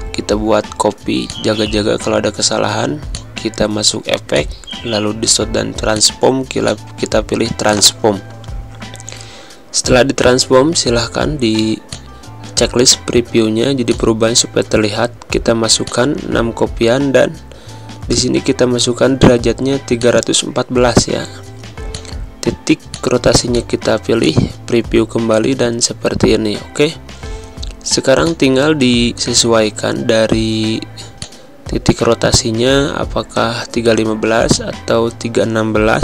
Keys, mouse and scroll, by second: 1.2 click, 10.1 click, 10.3 Pause, 11.9 click, 13.8-15.1 drag, 15.1 6, 15.8-17.3 drag, 17.3 3, 18.6-19.1 typing, 19.9 click, 21.9 click, 28.2 click, 31.4 click, 34.4-36.0 drag.